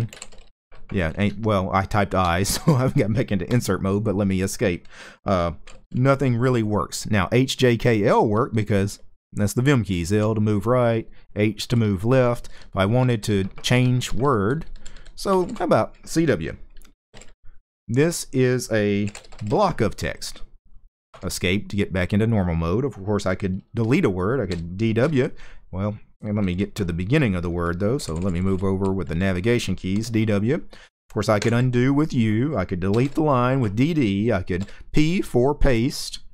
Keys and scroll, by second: 0.0-0.9 typing, 3.2 Escape, 5.1-6.3 typing, 8.0-15.5 typing, 16.6-17.4 typing, 18.5-19.7 typing, 20.8 Escape, 24.2-24.7 typing, 27.7-31.1 typing, 32.6 d, 32.7 d, 34.3 p, 36.2-36.3 typing.